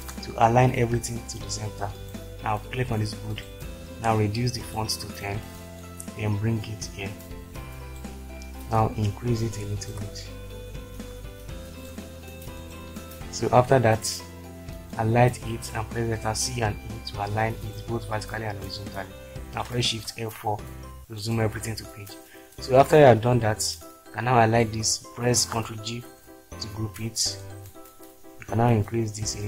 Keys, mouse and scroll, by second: 15.4 click, 15.8 click, 16.3 c, 17.2 e, 19.9 shift+F4, 24.5 click, 25.9 ctrl+g.